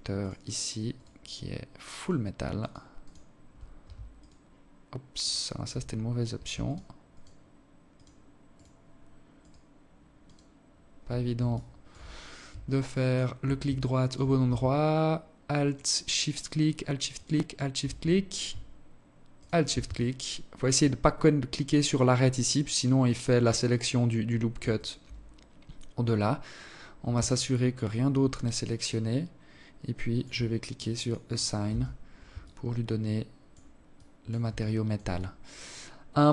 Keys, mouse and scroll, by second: 0.7 alt+shift+right click, 1.3 alt+shift+right click, 1.7 alt+shift+right click, 2.9 alt+shift+right click, 3.9 alt+shift+right click, 5.4 alt+shift+right click, 5.9 alt+shift+right click, 6.7 alt+shift+right click, 7.3 alt+shift+right click, 8.1 alt+shift+right click, 8.9 alt+shift+right click, 10.3 alt+shift+click, 10.7-11.1 scroll up 5, 11.1-11.5 alt+shift+scroll down 1, 11.5 alt+shift+click, 12.5 alt+shift+click, 14.3 alt+shift+right click, 15.1 alt+shift+right click, 15.9 alt+shift+right click, 18.1 alt+shift+right click, 18.7 alt+click, 23.5 shift+right click, 24.8-25.5 scroll down 8, 27.1 alt+click, 29.7 click, 30.4 Tab, 31.1 alt+click, 32.7 alt+click, 33.3 alt+shift+click, 33.9 alt+click.